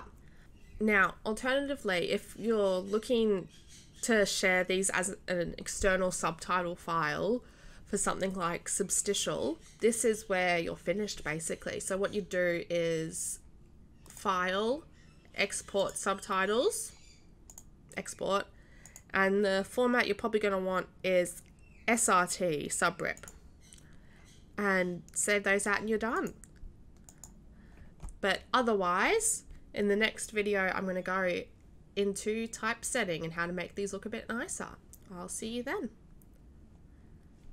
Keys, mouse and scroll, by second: 14.0 click, 14.3 click, 15.7 click, 17.4 click, 18.8 click, 19.0 click, 23.1-23.4 drag, 26.1 click, 27.0 click.